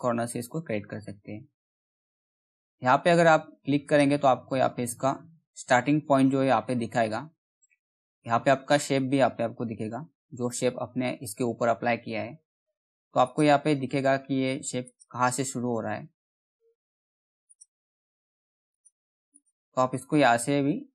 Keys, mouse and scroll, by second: 3.0 middle click, 3.4 click, 4.3-5.6 scroll up 1, 5.8 alt+middle click, 5.8 alt+middle click, 7.0-7.5 scroll up 1, 7.6 alt+middle click, 8.2 scroll down 1, 8.4 middle click, 9.0-9.4 scroll up 1, 10.0 middle click, 12.7 click, 15.4-15.8 scroll down 1, 15.8 middle click, 17.0 click, 17.0 click.